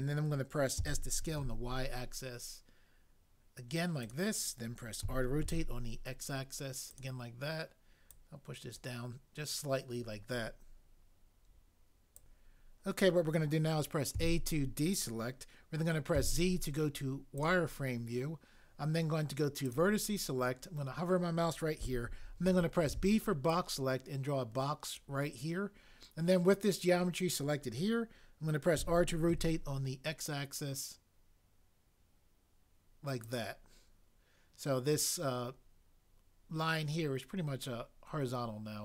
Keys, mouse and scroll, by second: 0.8 s, 1.4 y, 5.0-5.4 typing, 14.2 a, 16.2 z, 22.8 b, 28.8 r, 29.2 x.